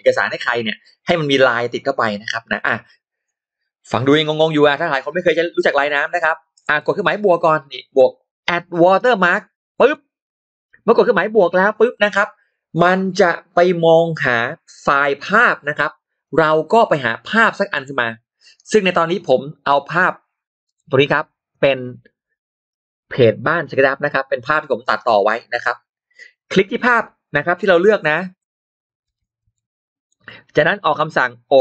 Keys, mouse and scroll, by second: 6.4 shift+right click, 6.6 shift+right click, 6.8 click, 9.6 click, 9.6 right click, 9.7 right click, 17.6 click, 18.9 click, 20.5 click, 29.0 shift+x, 29.4 shift+click, 30.1-31.6 shift+drag.